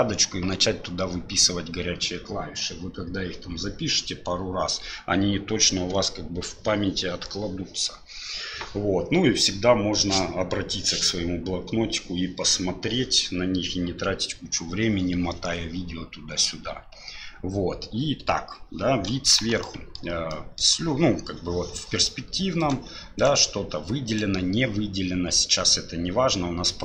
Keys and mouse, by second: 19.1 KP_7, 19.7 middle click, 20.3 click, 22.6 right click, 23.2 right click, 24.1 right click.